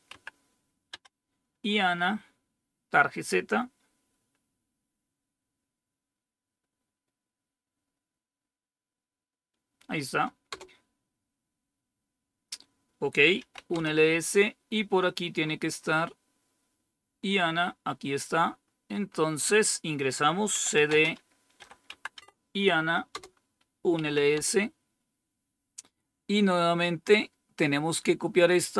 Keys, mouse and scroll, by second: 0.8 Tab, 10.4 Return, 13.2-14.0 typing, 15.3-16.4 scroll up 1, 18.5-19.9 scroll down 5, 20.4-21.8 typing, 22.0 Tab, 23.0 Return, 23.6-24.3 typing, 26.5-27.3 typing, 26.8-27.9 scroll down 2, 27.9-28.5 scroll down 1, 28.5-28.7 scroll down 1.